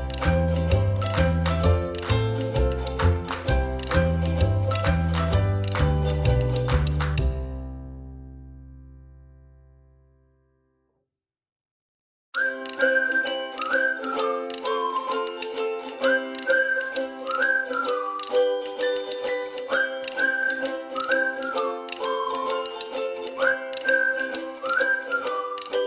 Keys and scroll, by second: 0.8 space, 13.9 ctrl+z, 15.3 space, 16.8 space, 19.1 ctrl+c, 19.4 ctrl+f, 20.6 space.